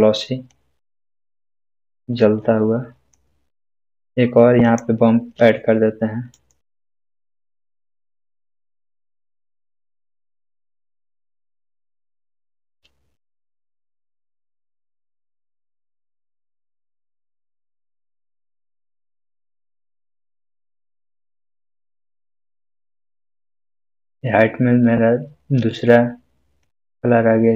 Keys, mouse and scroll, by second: 0.5-3.3 drag, 6.3 right click, 7.6-13.5 drag, 17.7-18.6 drag, 20.2 scroll up 1, 22.6-24.1 middle drag, 26.8-27.5 drag.